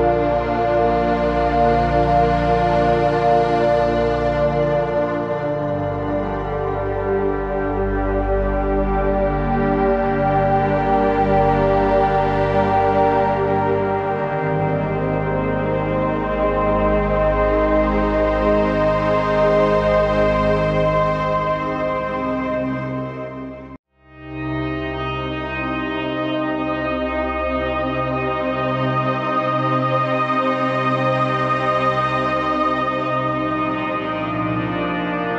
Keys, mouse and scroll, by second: 0.0 shift+click, 1.3 right click, 2.6-9.8 drag, 17.3-18.1 scroll down 1, 18.8-20.4 typing, 19.2 click, 19.6 click, 19.8 click, 20.3 click, 20.6-26.7 drag, 28.4 alt+shift+click, 30.6 shift+Up, 32.9 click, 33.7 Down, 35.0-35.3 typing, 35.2 click.